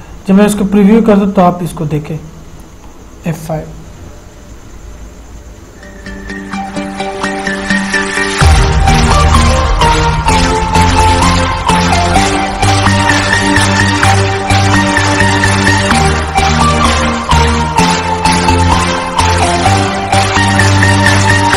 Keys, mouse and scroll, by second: 3.1 F5.